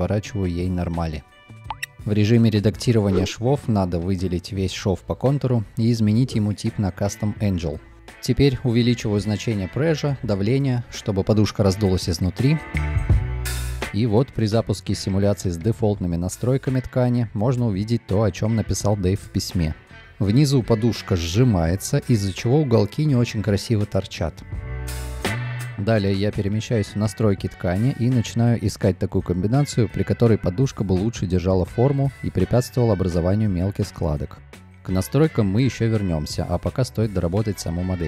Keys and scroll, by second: 3.6 b, 14.9 space, 22.9 space, 29.4 2, 30.2 space, 35.3-37.0 typing.